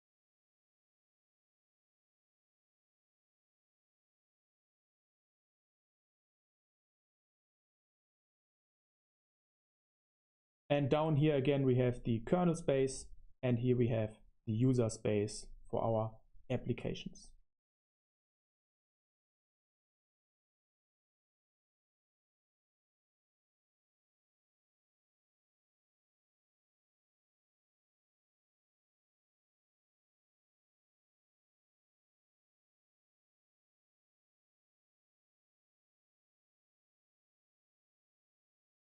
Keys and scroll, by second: 0.0-6.7 typing, 0.6 Return, 8.1 super+1, 8.1-9.1 typing, 17.6 space, 19.6 super+3, 21.8 i, 22.3 BackSpace, 23.7 Escape, 24.7-34.3 typing, 34.3 Escape, 36.0-38.1 typing.